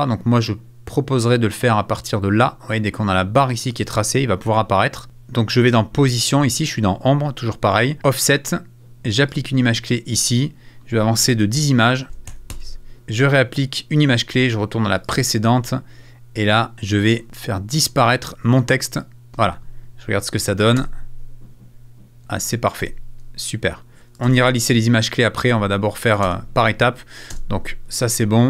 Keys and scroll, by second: 12.0 Right, 20.8 space, 22.2 space, 24.0 space, 24.2 space, 25.4 space.